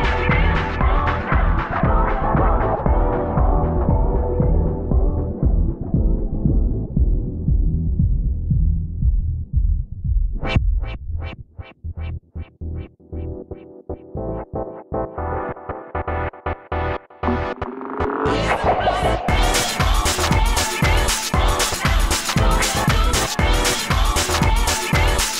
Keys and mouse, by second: 0.0-3.3 typing, 4.5-7.2 typing, 5.3 click, 8.8 f, 10.0 f, 10.6 f, 11.4 s, 11.8 s, 12.7-13.6 drag, 14.7 s, 14.8-18.1 drag, 15.8 s, 16.5 s, 16.6 f, 18.8 s, 18.9 f, 20.7 ctrl+z, 20.8 ctrl+z, 22.6 Tab, 22.8 Tab, 24.6 ctrl+z, 25.0 Tab, 25.2 Tab.